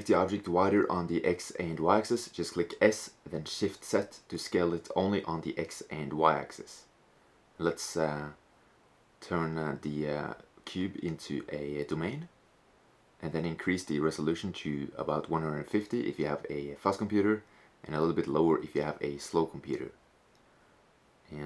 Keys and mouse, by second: 0.1 s, 3.1 click, 3.8-7.0 drag, 7.2-9.1 drag, 9.7-11.7 drag, 12.7-14.4 drag, 17.2-18.9 drag.